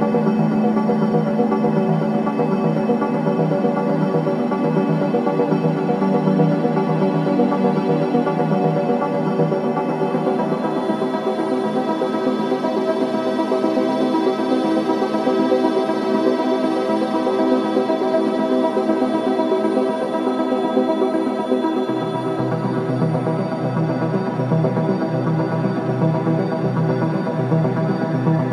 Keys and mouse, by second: 1.9 ctrl+s, 2.8 alt+a, 3.4 ctrl+alt+click, 4.5-11.4 drag, 15.0 click, 19.4 click, 21.2 click, 22.3 click, 23.8 ctrl+s, 25.3 alt+click, 26.0 click.